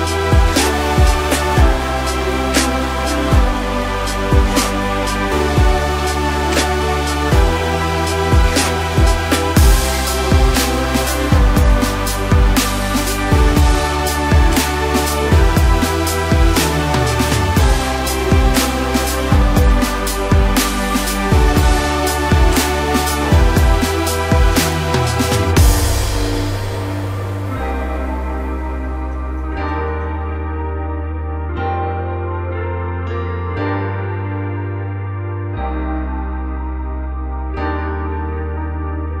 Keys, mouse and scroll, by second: 9.5 click, 10.6 drag, 18.6 scroll down 2, 18.9-19.7 middle drag, 19.7 scroll up 1, 20.4 KP_1, 22.2 click, 22.6-24.2 scroll down 7, 24.2-24.6 drag, 24.6-25.6 scroll down 1, 25.6 click, 26.8-27.1 scroll down 2, 27.6-28.0 drag, 28.0-29.0 scroll down 3, 29.0-31.6 drag, 31.6-31.9 scroll up 2, 31.9-32.3 scroll down 2, 32.3-39.2 middle drag.